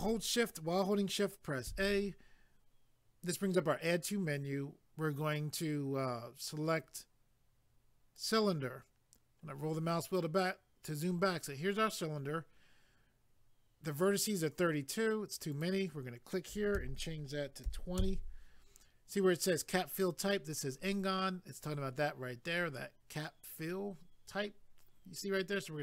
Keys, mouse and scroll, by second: 8.2 click, 9.4-10.7 scroll down 1, 15.5 click, 16.8 2, 18.0 Return.